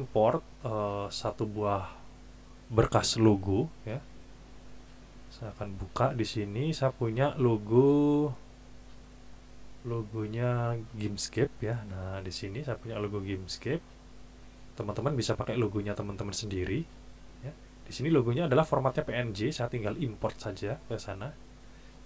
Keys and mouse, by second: 6.7 click, 10.9 click, 13.5 click, 21.7-22.0 drag.